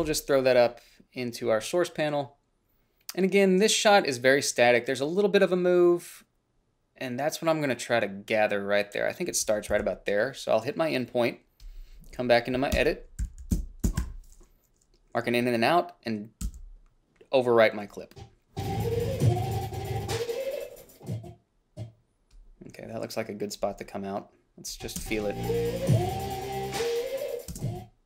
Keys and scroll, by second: 0.3 f, 10.0 i, 13.1 Up, 13.5 i, 13.8 Down, 14.1 Left, 14.3 o, 16.7 b, 25.3 space, 27.8 space.